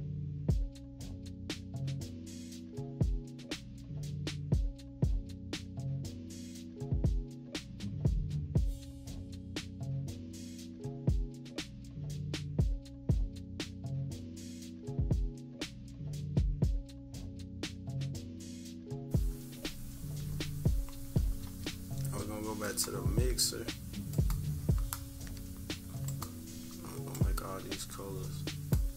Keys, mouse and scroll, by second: 0.0-0.6 scroll up 4, 0.1 =, 0.4 =, 0.9-2.4 drag, 2.5 scroll down 1, 2.5 -, 2.7 scroll up 1, 2.8 click, 3.5 -, 3.6 =, 3.7 scroll up 1, 3.8 scroll down 1, 4.0-5.4 drag, 5.6 -, 5.8 scroll down 1, 6.0-7.0 drag, 7.0 -, 7.3 =, 7.5-9.0 drag, 9.0 scroll up 1, 9.2 click, 10.3 click, 11.1 -, 11.4 click, 12.3 -, 12.5 =, 12.5 scroll up 1, 12.8-14.6 drag, 14.7 click, 15.3 click, 16.1 -, 16.3 scroll down 1, 16.4 =, 16.5 scroll up 1, 16.7 click, 17.3-18.4 drag, 18.5 -, 18.7 scroll down 2, 18.8 =, 20.9 -, 22.6 click, 24.1-28.7 drag.